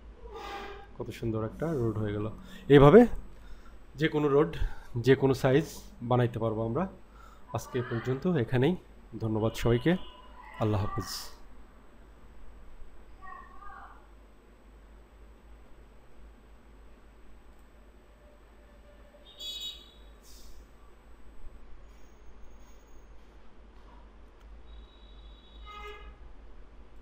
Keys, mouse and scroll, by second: 0.0-1.2 middle drag, 1.2-1.5 scroll down 1, 1.5-2.5 scroll up 4, 2.5 scroll down 1, 10.5 click, 12.0-13.6 scroll up 6, 14.3-15.0 scroll up 3, 15.0-16.1 scroll down 5, 16.1-17.6 scroll up 1, 17.6 click, 18.3-18.7 scroll up 2, 19.1-20.3 middle drag, 20.5 scroll down 2, 22.3 scroll up 1.